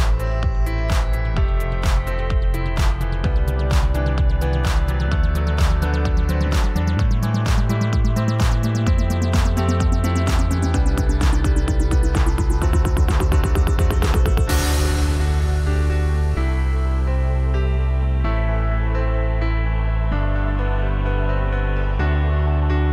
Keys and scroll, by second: 19.5 a.